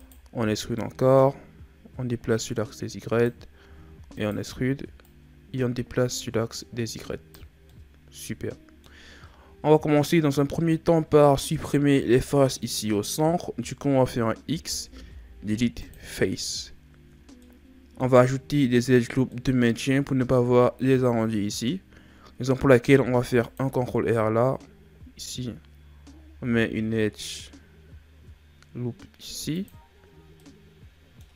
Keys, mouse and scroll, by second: 0.8 click, 3.7 e, 5.0 click, 7.7-9.2 middle drag, 9.2-12.2 ctrl+scroll up 2, 14.5 x, 17.4-18.9 middle drag, 18.9-19.3 scroll down 1, 19.3-22.3 middle drag, 22.9 ctrl+r, 30.4-31.3 middle drag.